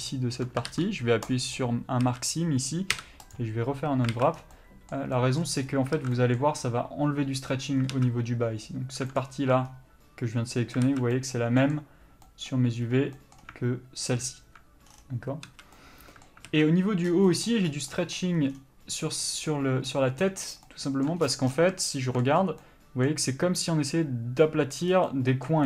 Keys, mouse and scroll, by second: 1.6 ctrl+e, 2.2 a, 3.5 u, 4.3 alt+a, 9.3 alt+click, 11.0 alt+a, 11.8 middle click, 14.4 alt+click, 15.6 a, 16.7 alt+a, 20.8 middle click, 21.4-22.0 scroll down 1, 22.0 shift+middle click, 22.6 scroll up 1, 22.8 middle click, 25.1 scroll down 1, 25.2 middle click.